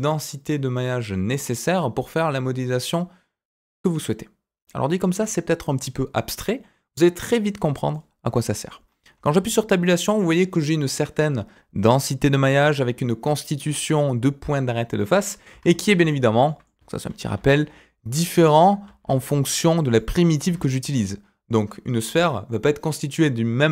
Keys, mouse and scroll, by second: 7.9 middle click, 8.7-9.1 scroll up 2, 9.1 Tab, 15.3 scroll down 2, 15.5 Tab, 15.9 g, 17.3 ctrl+a, 18.8 shift+a, 20.1 scroll up 2, 20.4 Tab.